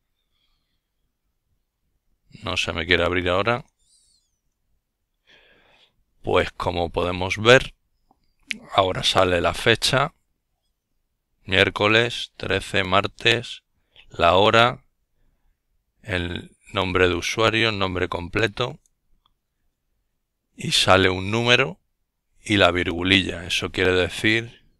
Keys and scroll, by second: 19.7-21.0 typing, 21.5 Return.